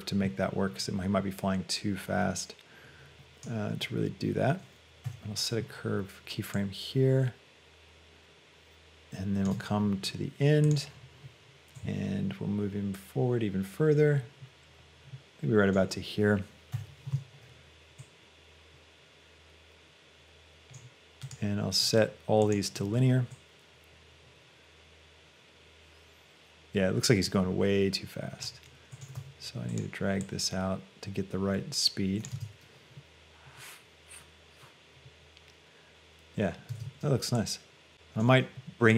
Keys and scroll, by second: 16.8 i, 29.2 g, 32.5 space, 36.9 space.